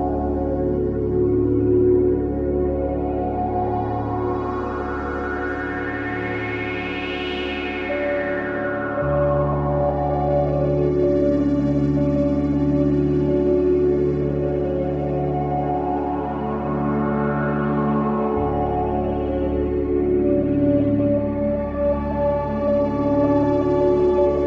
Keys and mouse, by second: 0.0 click, 2.5 Escape, 3.9 F3, 8.0-9.0 typing, 10.7 Return, 14.2 alt+a, 15.3 Tab, 15.8 Tab, 17.1 Tab, 17.7 click, 18.4 Tab, 19.6 Tab, 20.9 click, 22.1 alt+a.